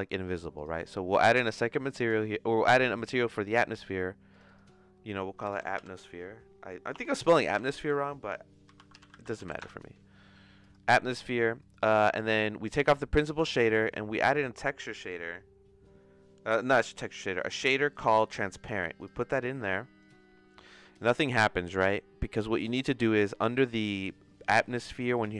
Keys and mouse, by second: 0.6 click, 1.9 click, 4.3-10.1 drag, 11.6 click, 12.1 x, 13.0 middle click, 13.4 shift+a, 19.5 click, 25.1 click.